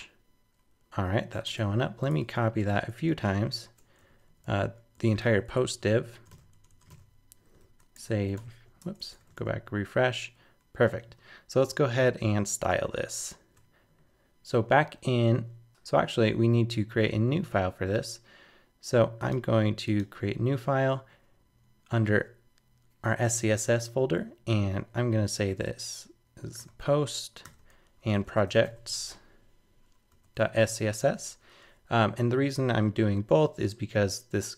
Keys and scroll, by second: 1.4 super+Tab, 4.9 shift+super+Left, 5.2 super+c, 6.3 super+v, 7.9 super+Tab, 8.4 super+r, 8.8 super+Tab, 9.4 super+r, 10.9 super+r, 12.6 super+Tab, 24.5 super+s.